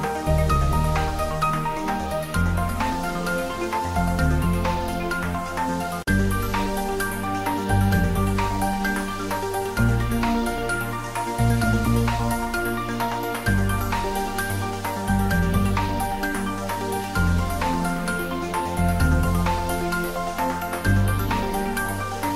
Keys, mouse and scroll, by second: 1.4-2.8 typing, 2.8 click, 5.7-7.2 typing, 7.0 click, 9.9-11.2 typing, 11.0 click, 12.2-13.5 typing, 13.3 click, 17.3 click, 18.4 ctrl+middle click, 19.2 shift+click, 19.8-20.8 typing.